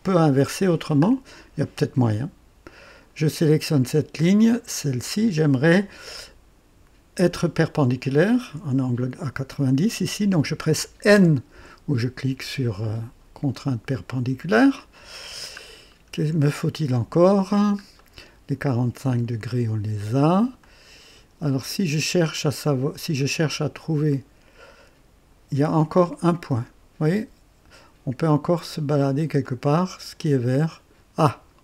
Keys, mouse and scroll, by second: 0.6-1.0 scroll down 1, 2.6 click, 4.6 click, 11.1 n, 11.2 n, 15.0 scroll down 2, 15.8 scroll down 1, 16.4-17.2 right drag, 17.5 scroll down 1, 18.0 right click, 19.1-19.9 drag, 20.6-21.3 drag, 22.3-23.1 drag, 23.2 click, 24.1-25.5 drag, 26.3 click, 29.4-31.6 drag.